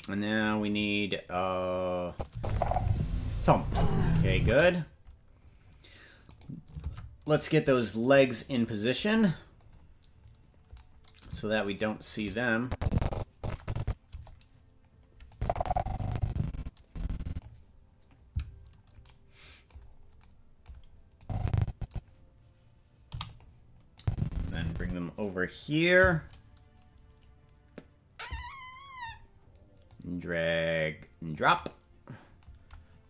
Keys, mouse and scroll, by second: 2.1 click, 2.3 space, 4.4 space, 6.4 right click, 6.8 ctrl+Tab, 7.4 right click, 7.8-9.0 scroll down 3, 9.0-9.7 scroll down 4, 9.6-10.7 scroll up 3, 11.8 shift+right click, 12.6-13.8 drag, 14.1 KP_0, 15.3-17.4 drag, 18.5-19.0 scroll down 2, 19.8-20.2 scroll down 4, 21.2 click, 23.1 i, 24.0-25.0 drag, 25.5-26.2 scroll down 1, 26.2 scroll down 2, 29.9-31.4 drag.